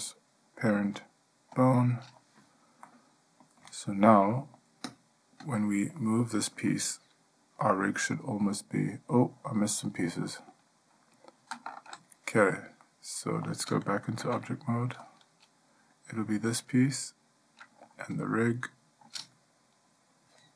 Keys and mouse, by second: 3.0-3.6 middle drag, 3.9-4.3 ctrl+middle drag, 4.5 middle click, 5.1 click, 5.6 click, 6.2-6.8 ctrl+middle drag, 8.2 g, 13.0-13.6 middle drag, 14.4 Tab.